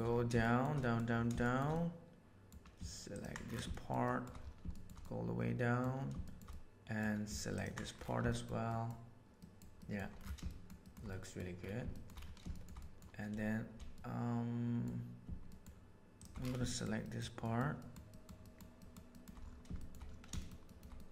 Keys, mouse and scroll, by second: 0.4 shift+middle click, 0.8 middle click, 1.4 shift+middle click, 1.7 middle click, 3.1 ctrl+middle click, 3.6 shift+middle click, 4.0 shift+middle click, 4.7 shift+middle click, 5.0 middle click, 6.2 shift+middle click, 6.5 middle click, 8.2 shift+middle click, 8.6 shift+middle click, 9.4 shift+middle click, 9.7 shift+middle click, 10.4 shift+middle click, 10.8 shift+middle click, 11.0 middle click, 11.9 shift+middle click, 12.5 shift+middle click, 12.8 middle click, 13.9 middle click, 15.4 shift+middle click, 16.6 shift+middle click, 17.0 shift+middle click, 17.4 shift+middle click, 17.8 shift+middle click, 18.1 shift+middle click, 18.4 shift+middle click, 18.7 shift+middle click, 19.7 shift+middle click, 20.3 shift+middle click, 20.6 shift+middle click, 20.9 middle click.